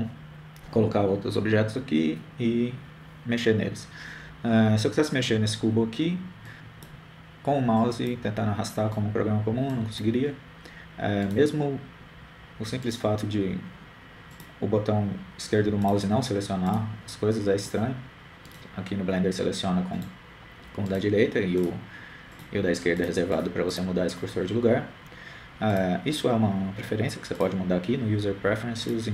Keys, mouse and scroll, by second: 7.9-12.4 drag, 12.6 right click, 14.2 right click, 15.7-17.1 drag, 17.3-19.5 drag, 19.2 right click, 21.6 right click, 23.3-27.0 drag, 27.3-28.7 drag.